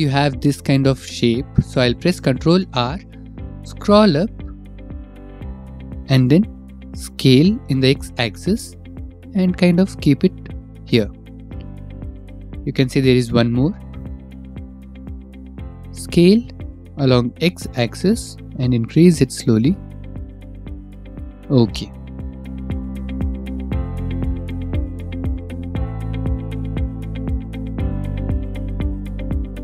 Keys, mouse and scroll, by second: 4.4 ctrl+r, 6.1 scroll, 7.6 click, 8.3 right click, 9.5 s, 10.0 x, 13.4 click, 13.9 ctrl+r, 13.9 middle click, 13.9 right click, 15.0 middle click, 16.6 click, 17.1 right click, 18.5 s, 19.5 x, 22.6 ctrl+r, 22.6 middle click, 23.0 middle click, 23.6 click, 23.8 right click, 24.2-25.5 typing, 25.2 Escape, 26.9 click, 27.4 ctrl+r.